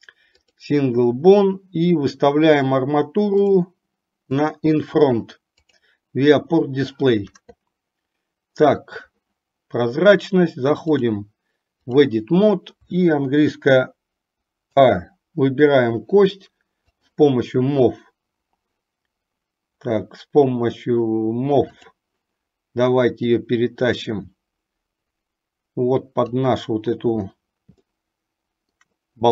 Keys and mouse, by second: 5.7-6.1 drag, 11.0-12.3 drag, 14.9 a, 17.1 click, 21.9 click, 23.5-26.4 drag, 28.1 shift+middle click.